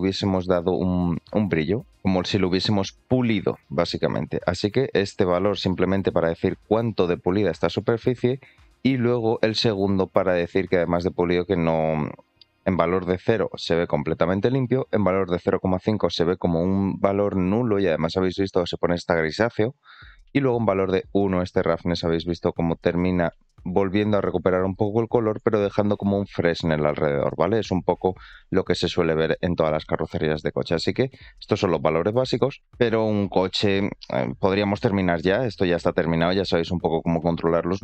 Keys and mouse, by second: 3.5-7.7 drag, 8.7-17.2 drag, 20.3-25.3 drag, 29.5-30.0 middle drag, 32.6-32.9 middle drag, 33.1 shift+middle drag, 34.5 middle drag, 35.9-37.0 drag, 37.7-37.8 middle drag.